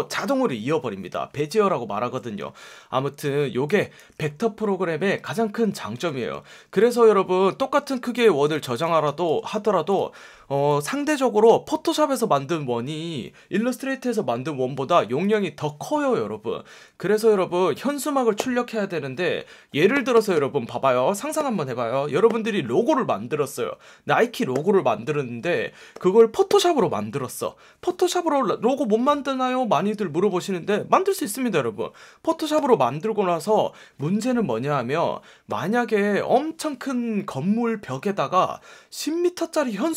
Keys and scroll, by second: 4.0 super+z, 8.3 space, 8.9 space.